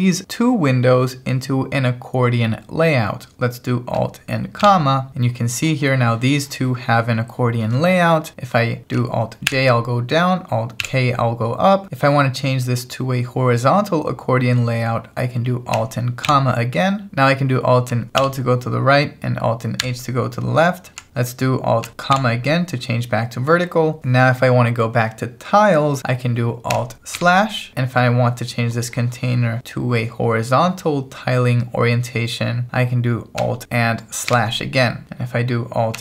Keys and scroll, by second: 4.6 alt+,, 9.5 alt+j, 10.8 alt+k, 16.3 alt+,, 18.2 alt+l, 19.9 alt+h, 22.1 alt+,, 27.2 alt+/, 34.3 alt+/, 35.0 alt+h.